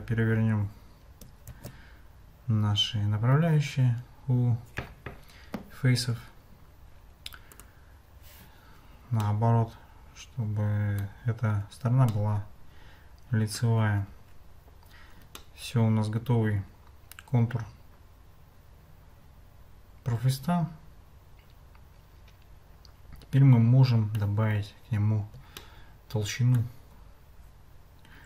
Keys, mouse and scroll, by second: 1.5 alt+n, 9.2-11.1 middle drag, 12.1-13.6 middle drag, 13.9 Tab, 15.4-24.2 middle drag, 25.6-26.6 shift+middle drag.